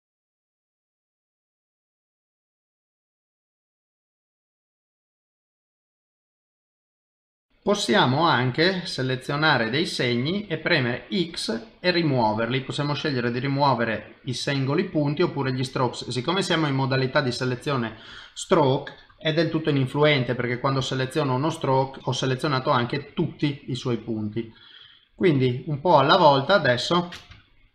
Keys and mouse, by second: 0.3 click, 0.3 middle click, 1.6 click, 1.8 click, 2.2 middle click, 2.7 click, 2.8 click, 3.0 click, 3.3 click, 3.3 middle click, 4.1 click, 4.1 middle click, 5.0 g, 7.2 middle click, 7.5 middle click, 8.7 click, 9.3 middle click, 10.3 x, 11.7 i, 23.6 middle click.